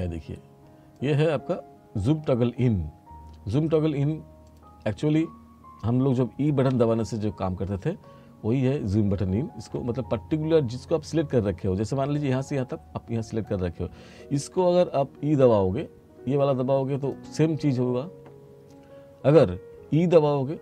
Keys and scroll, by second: 9.7 e, 19.4 e.